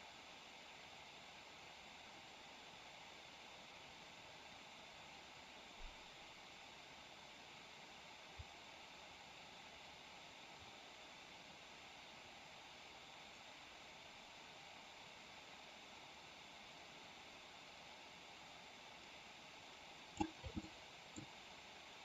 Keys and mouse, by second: 20.6-21.1 middle drag.